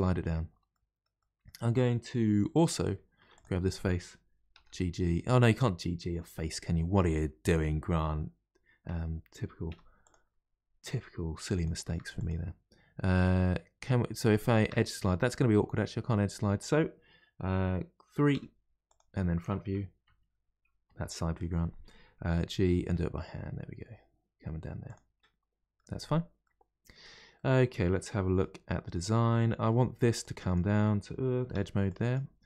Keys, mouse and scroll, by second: 0.1-0.7 scroll up 2, 0.7-3.2 middle drag, 3.2 3, 3.4 click, 4.5 g, 9.7 2, 10.0 click, 11.6 shift+click, 12.2 click, 13.8-18.3 middle drag, 18.3 3, 18.9 click, 20.0 KP_3, 22.4 g, 25.2 middle click, 26.1-26.4 scroll down 1, 26.4-30.2 middle drag, 30.2 click, 31.5 2, 31.8 click.